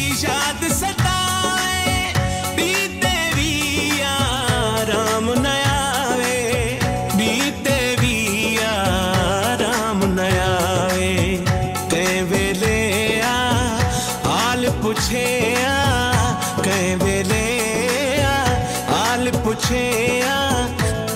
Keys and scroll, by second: 2.8 Home, 3.4 space, 3.8 f, 4.3 m, 5.1 ctrl+z, 6.8 space, 8.0-10.7 typing, 12.0 BackSpace, 12.2 e, 13.5-15.4 typing, 15.9 ctrl+s, 16.7 Right.